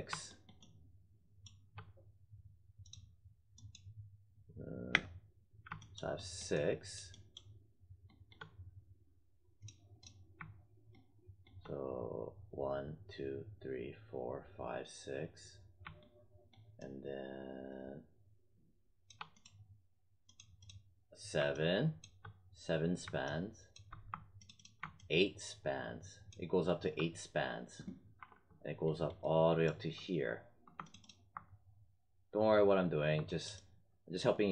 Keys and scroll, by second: 4.8 space, 28.1 4.